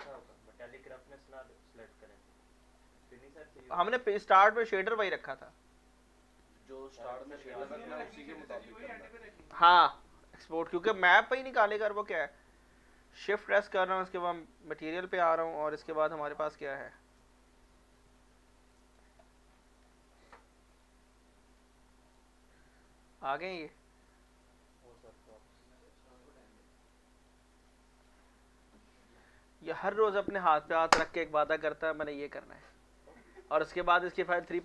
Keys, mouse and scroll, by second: 1.7 ctrl+s, 1.8 alt+click, 2.8 alt+right click, 3.1 alt+click, 6.2 click, 6.4 click, 11.7 alt+Num_Lock, 11.7 click, 11.8 alt+middle click, 12.4 middle click, 13.2-14.3 typing, 14.4-15.7 shift+middle drag, 15.7 click, 18.2-19.5 drag, 19.5-19.9 scroll up 1, 19.9 middle click, 20.7 click, 21.5 click, 22.4-25.8 drag, 25.8 middle click, 26.9-28.6 drag.